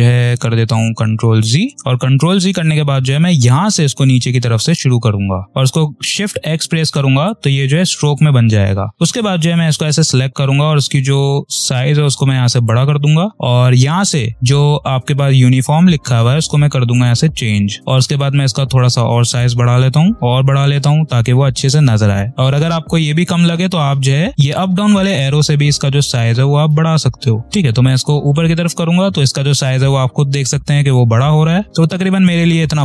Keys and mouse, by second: 3.3 click, 5.5 shift+x, 7.2 ctrl+click, 8.8 v, 8.9-11.6 drag, 16.8 click, 24.3-32.8 drag.